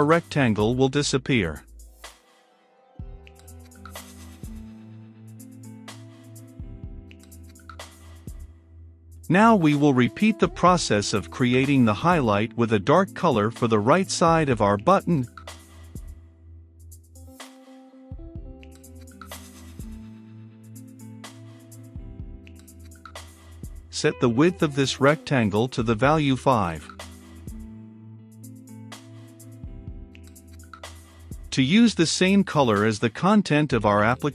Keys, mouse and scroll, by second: 1.7 t, 1.9 r, 2.1 u, 3.2 Return, 4.3 u, 4.5 e, 5.6-8.2 drag, 8.2-10.0 middle drag, 10.0-11.1 drag, 11.1 right click, 12.0-13.2 drag, 13.2 Return, 13.9 ctrl+v, 14.7-16.3 middle drag, 16.3-17.5 drag, 17.5 r, 17.6 i, 17.8 g, 18.5 Return, 20.7 click, 21.4 r, 21.6 i, 21.8 g, 22.1 h, 22.5 Return, 23.9-32.1 drag, 32.1-33.4 middle drag, 33.4-34.3 drag.